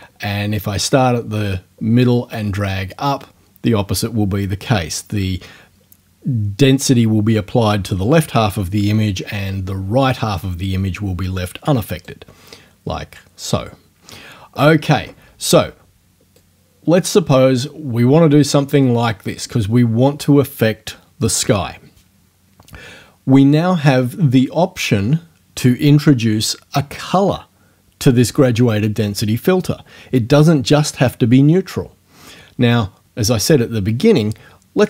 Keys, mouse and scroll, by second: 1.0-12.2 right drag, 16.4-18.9 right drag.